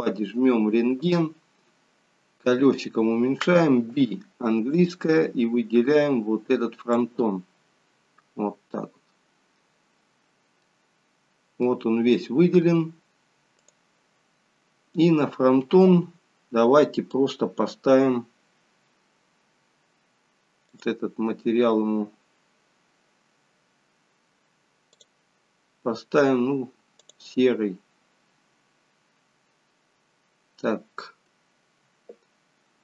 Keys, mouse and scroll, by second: 1.1 click, 3.8-4.5 scroll down 3, 3.8 b, 9.3-10.6 scroll up 1, 10.6 middle click, 10.6-12.7 scroll up 3, 13.8 click, 20.7 click, 25.0 click.